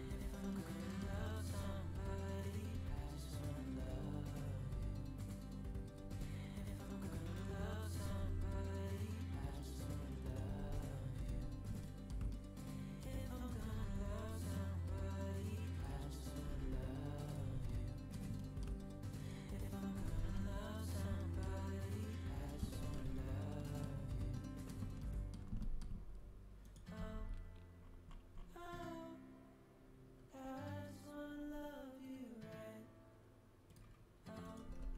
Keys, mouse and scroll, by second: 0.2-1.2 middle drag, 2.6 g, 8.0 g, 10.4 g, 12.3-15.6 middle drag, 13.3-15.6 drag, 13.4 g, 16.2-17.9 drag, 16.4 g, 17.6 middle click, 18.8-21.0 middle drag, 25.7 middle click, 26.9 g, 34.4-34.9 middle drag, 34.6 g.